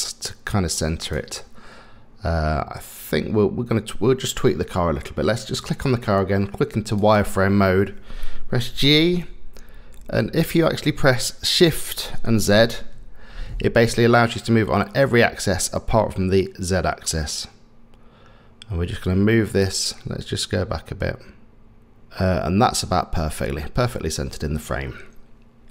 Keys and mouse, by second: 5.5 click, 7.0 click, 8.6 g.